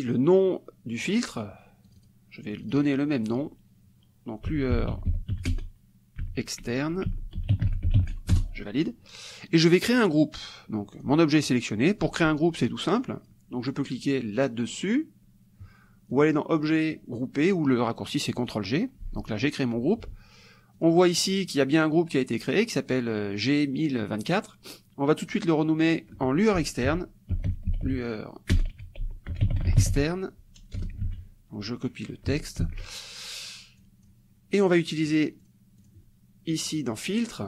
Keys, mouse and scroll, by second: 1.0 click, 1.9-4.5 drag, 4.3-5.8 typing, 6.9-8.4 typing, 10.4 click, 11.0 click, 13.0 click, 16.1 click, 18.4 click, 20.8-25.7 drag, 26.7-30.3 typing, 31.0 ctrl+BackSpace, 32.7 ctrl+c, 33.8 click, 35.0 click, 35.4 click, 35.8 click, 36.7 click.